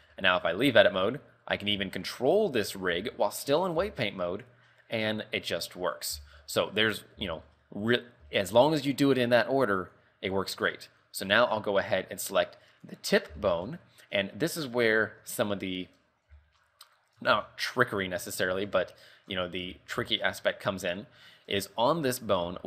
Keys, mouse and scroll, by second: 0.3 shift+middle click, 0.6 middle click, 1.2 r, 1.9 KP_3, 2.7 shift+middle click, 4.1 r, 6.5 z, 6.7 shift+middle click, 7.0-7.4 scroll up 5, 7.5 shift+middle click, 7.8 middle click, 8.5 shift+middle click, 10.2 right click, 10.9 middle click, 13.1 right click, 13.5 shift+middle click, 13.9 scroll up 4, 15.1 Tab, 15.3 scroll down 3, 15.6 middle click, 16.3 a, 16.5 shift+middle click, 16.9 scroll up 4, 17.5 Tab, 17.8-18.1 scroll down 4, 18.2 middle click, 19.1 middle click, 19.5 scroll down 2, 19.9 Tab, 20.2 shift+middle click, 20.4 shift+middle click, 20.5 middle click, 22.0 middle click, 22.0 shift+middle click.